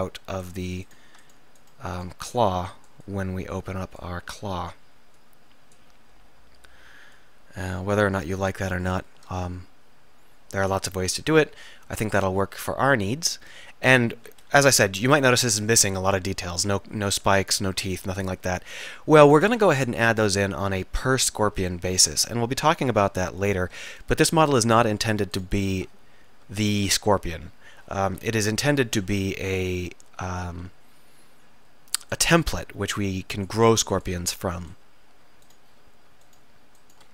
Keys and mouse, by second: 0.5-4.1 middle drag, 4.6-8.3 drag, 10.8-12.3 middle drag, 14.5 KP_1, 15.0 KP_1, 15.1 KP_3, 18.5-19.9 middle drag, 28.3 KP_1, 28.7 KP_3, 30.6 r, 35.5-37.1 middle drag.